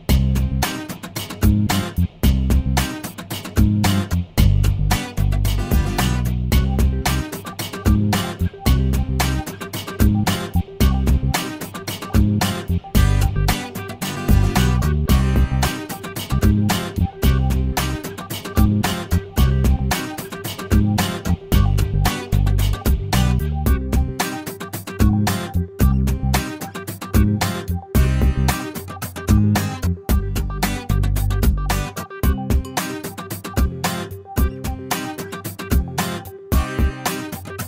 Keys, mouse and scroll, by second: 3.5 shift+click, 9.8 shift+scroll down 1, 10.0 middle click, 10.7-11.1 scroll down 1, 15.7 shift+right click, 19.0 shift+right click, 29.1 click, 30.0 click, 32.5 ctrl+s, 35.1-36.5 drag.